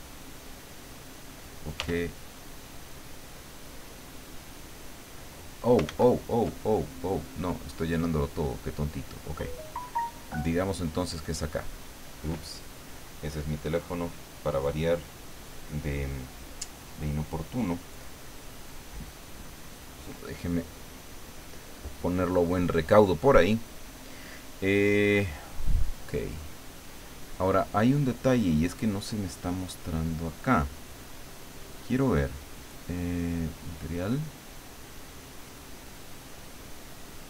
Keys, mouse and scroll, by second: 0.0-1.3 drag, 1.8 f, 2.8-4.6 drag, 5.8 ctrl+z, 7.2 click, 8.6 click, 9.2-11.6 drag, 25.5-26.9 drag, 31.4 click, 33.5 click, 36.2-37.2 drag.